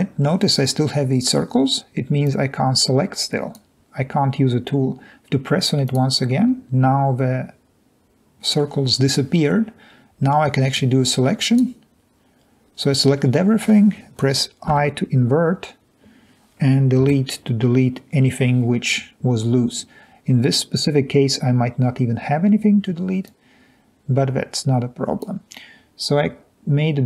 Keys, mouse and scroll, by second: 2.7 drag, 14.8 i, 17.0 Delete.